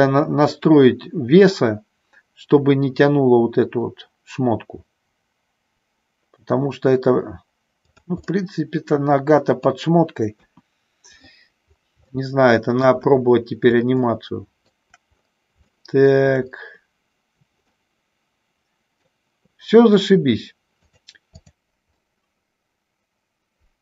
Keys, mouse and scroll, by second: 8.0 click, 8.3-9.9 middle drag, 10.4 KP_1, 12.1 shift+middle click, 14.1 shift+middle click, 15.7 shift+middle click, 17.8-19.3 middle drag, 21.0 click, 21.5 f, 22.1-23.8 middle drag.